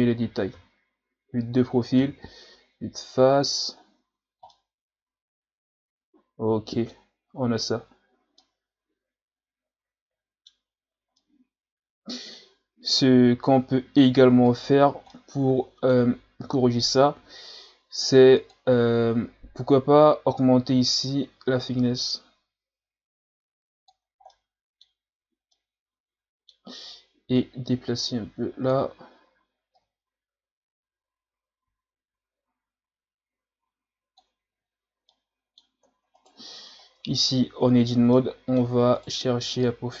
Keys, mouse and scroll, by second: 0.5 KP_3, 2.0 KP_1, 2.4 Tab, 3.2-4.5 scroll down 5, 4.5-7.8 middle drag, 7.8-8.4 scroll up 1, 8.4-10.7 middle drag, 10.7 scroll up 5, 11.2-14.2 middle drag, 14.5 right click, 14.8 scroll down 1, 15.1-18.1 middle drag, 18.3 click, 19.1-19.8 scroll down 7, 20.7-23.7 drag, 24.3-27.4 middle drag, 27.4-32.8 drag, 34.5 a, 35.1-36.2 middle drag, 36.2 right click, 36.7-37.0 scroll down 1, 37.0 Tab, 37.8 scroll down 5, 38.1 middle click, 39.0 right click, 39.6-40.0 drag.